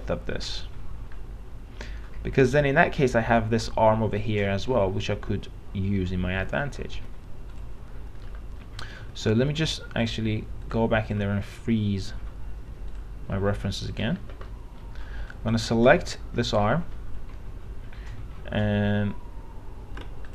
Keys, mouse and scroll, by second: 8.5 middle click, 10.2-12.3 drag, 14.2 click, 14.7 middle click, 15.1-15.5 scroll up 1, 15.5 click, 16.9 middle click.